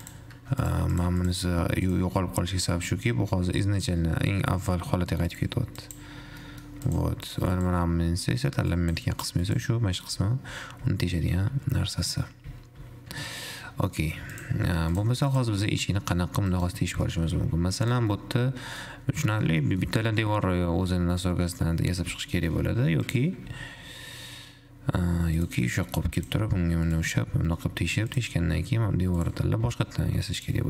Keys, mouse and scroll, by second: 1.2 shift+click, 2.1 click, 2.5-3.5 scroll down 1, 3.5-5.5 middle drag, 5.5 click, 6.0 drag, 6.6-7.1 middle drag, 7.1 click, 8.4-9.0 scroll up 5, 9.0 click, 9.7 click, 10.5 ctrl+z, 10.9 ctrl+z, 11.1 ctrl+z, 11.5 ctrl+z, 12.1 ctrl+z, 12.5 ctrl+z, 12.9 ctrl+z, 13.5-13.9 scroll down 2, 13.9-14.5 middle drag, 14.5 click, 15.2 click, 15.5 click, 16.0 r, 17.1 g, 18.5-19.7 middle drag, 19.7 scroll down 1, 20.0-22.0 middle drag, 22.0 r, 23.6 g, 26.0 middle click, 26.5 shift+click, 27.1 click, 27.9-28.5 middle drag, 28.5 click, 29.0 Tab, 29.3 2, 29.5 click, 30.0 e.